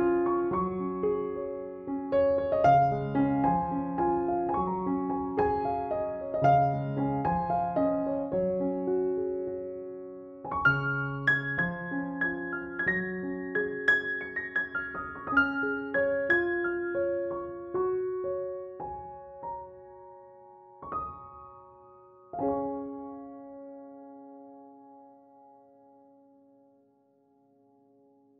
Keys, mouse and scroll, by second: 0.0-1.0 typing, 1.6-4.2 drag, 4.8-6.0 drag, 6.4 ctrl+z, 6.7-8.5 drag, 8.9-10.2 drag, 13.4 ctrl+f, 14.5 click, 15.8 space, 16.5 ctrl+l, 17.5 click, 24.7 space, 24.8 click, 25.1 space, 26.7 click.